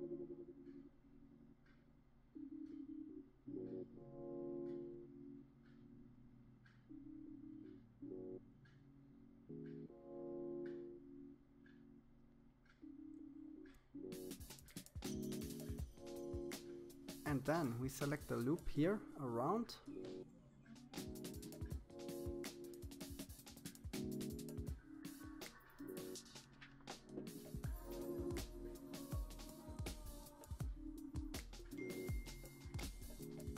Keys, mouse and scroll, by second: 0.0-1.5 scroll up 4, 2.3 alt+shift+click, 4.1-4.7 scroll down 6, 4.7-8.1 middle drag, 8.1-8.7 scroll up 2, 8.7 scroll down 1, 9.3 shift+middle click, 10.2-11.6 scroll up 1, 11.8 alt+shift+click, 13.0 alt+shift+click, 14.2 alt+shift+click, 15.6 alt+shift+click, 16.4 alt+shift+click, 17.2-18.7 scroll down 4, 19.7-21.3 middle drag, 21.6 KP_3, 22.3-22.9 scroll up 5, 22.9-24.5 shift+middle drag, 24.8-25.1 scroll up 2, 26.3 scroll up 1, 27.7 c, 29.7 shift+z, 30.8 c.